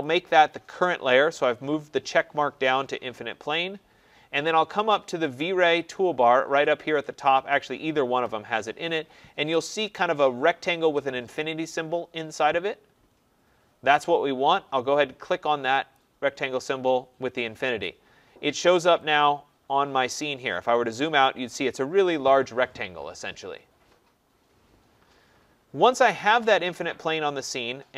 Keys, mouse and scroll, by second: 0.0 click, 15.9 click, 19.1 click, 20.1 middle click, 20.2-24.2 scroll, 20.8 middle click, 25.5 middle click, 25.5-27.4 scroll, 27.4-27.7 scroll, 27.7 middle click.